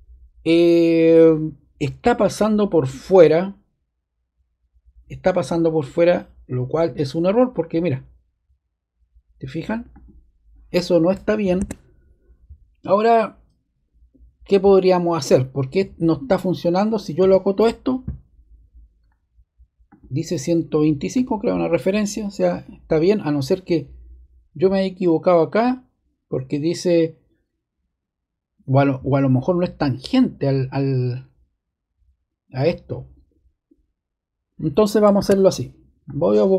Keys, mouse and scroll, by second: 9.9 click, 17.1 d, 17.8 click, 19.8 click, 35.1 super+z, 36.0 click.